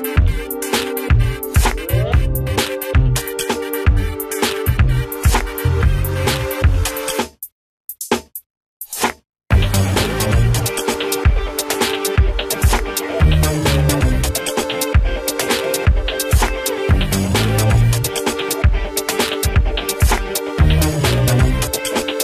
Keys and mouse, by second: 0.0-10.8 drag, 10.8 Delete, 14.3 click, 20.1 click.